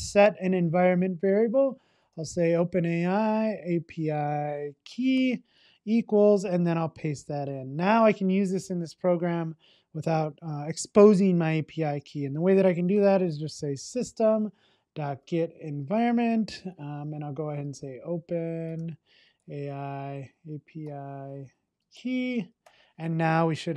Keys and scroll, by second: 8.7 super+v, 14.3 Return.